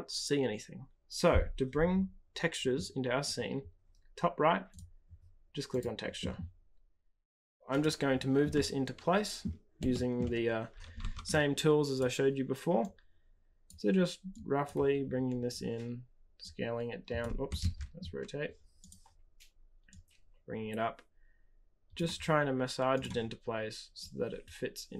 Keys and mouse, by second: 4.6-7.2 drag, 8.5-9.4 middle drag, 9.9 shift+middle drag, 10.1 shift+click, 11.9 click, 12.7 click, 14.3 click, 15.5 click, 16.4 click, 17.6 ctrl+z, 18.8 click, 19.9-21.9 drag, 22.9 click, 24.0-24.9 drag.